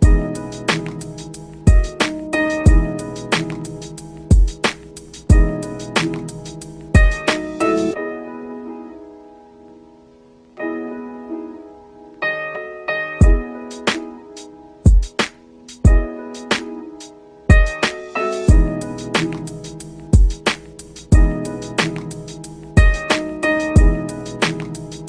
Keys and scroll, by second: 7.3 ctrl+g, 14.1 ctrl+q, 14.3 ctrl+k, 14.6 ctrl+u.